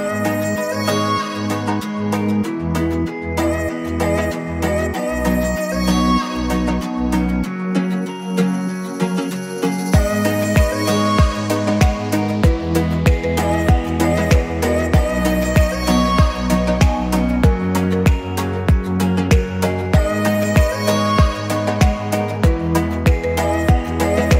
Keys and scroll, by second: 2.3 Escape, 6.6 2, 6.8 0, 7.1 Return, 9.3 2, 9.5 5, 9.6 0, 9.8 Return, 12.4 Escape, 14.2 Escape, 15.4 Escape, 17.3 Escape, 18.5 Escape, 23.3 Escape.